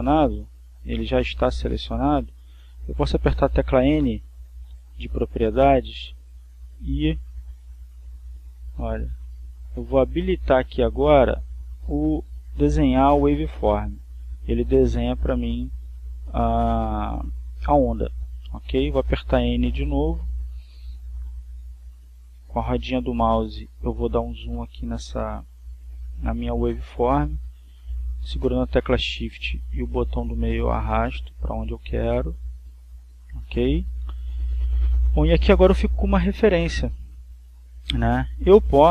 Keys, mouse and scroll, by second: 1.9-3.8 drag, 4.1 right click, 6.2 n, 8.2-13.3 drag, 15.2 click, 21.4 n, 22.9-23.4 scroll up 2, 24.4-24.7 scroll up 2, 24.7-25.4 scroll down 2, 25.4-26.1 scroll up 2, 26.1-26.7 scroll down 2, 26.7-27.7 scroll up 2, 27.9-28.3 scroll down 2, 28.3-28.8 scroll up 2, 31.6-35.4 shift+middle drag.